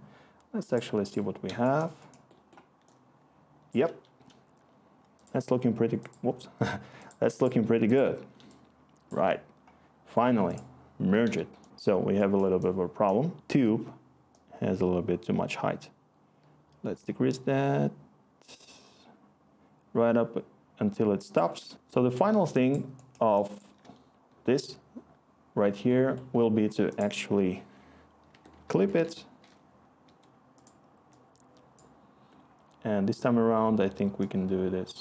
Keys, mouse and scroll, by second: 21.5 click, 28.2 Tab, 28.5 typing, 30.0 Return.